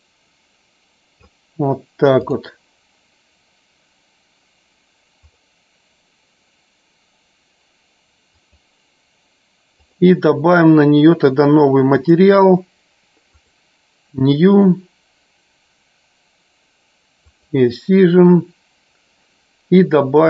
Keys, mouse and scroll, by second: 2.2 right click, 5.4 click, 8.2 click, 11.9 click, 13.5 click, 17.4 click.